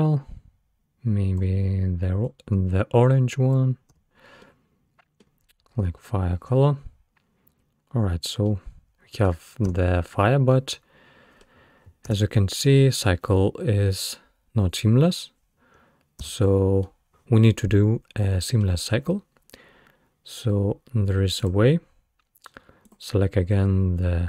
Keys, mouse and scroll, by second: 4.0 space, 4.5-5.8 middle drag, 5.8-8.5 scroll up 1, 8.5-9.7 middle drag, 9.7 space, 10.5-12.1 middle drag, 12.1 space, 16.2 space, 16.9-19.9 middle drag, 21.4 click, 22.9 click.